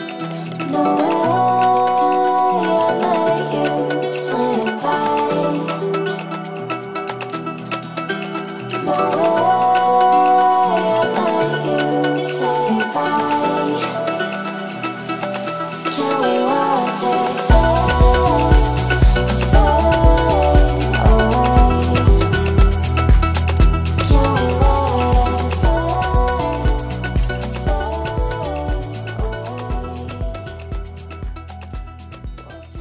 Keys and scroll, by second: 7.4 F4.